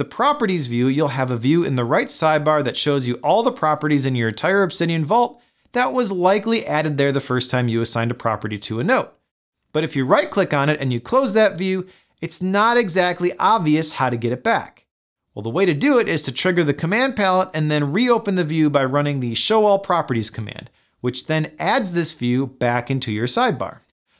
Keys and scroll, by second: 17.2 super+p.